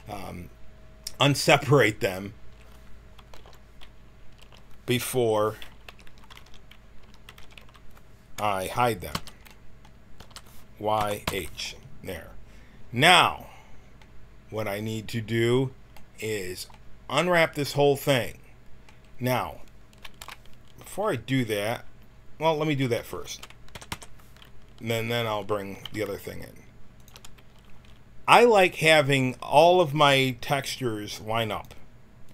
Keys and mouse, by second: 0.8 middle click, 3.3 alt+h, 4.3 a, 5.8-7.5 typing, 9.1 l, 9.5 middle click, 10.1 l, 10.9 y, 11.2 h, 13.9-15.2 middle drag, 20.1 KP_1, 22.7 a, 23.6 u, 23.8 u, 25.8 g, 31.4-32.3 drag.